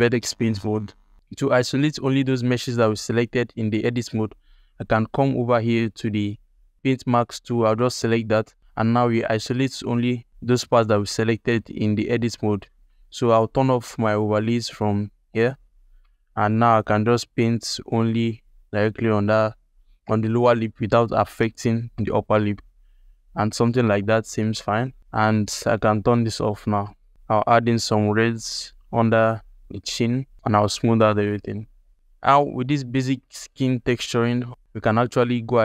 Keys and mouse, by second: 0.6 ctrl+alt+click, 7.9 ctrl+alt+click, 8.6-10.4 alt+drag, 10.8 ctrl+alt+middle click, 11.5 ctrl+alt+middle click, 11.9 z, 12.4 ctrl+middle click, 12.8 alt+middle click, 13.3 z, 15.9 middle click, 16.5-19.2 drag, 21.9 ctrl+alt+middle click, 22.5 ctrl+alt+click, 23.4 ctrl+alt+click, 23.7 alt+click, 24.5 ctrl+click, 24.9 f, 25.0 z, 26.4 click, 26.7 alt+shift+click, 27.1 x, 27.1 f, 27.2 f, 27.3 click, 27.7 click, 29.1 ctrl+z, 29.3 alt+click, 29.8 shift+f, 30.3 shift+click, 30.4-31.6 shift+middle drag, 31.7 ctrl+alt+middle click, 32.2 alt+middle click, 33.1 alt+middle click, 33.8 ctrl+alt+middle click, 34.2-35.6 alt+drag.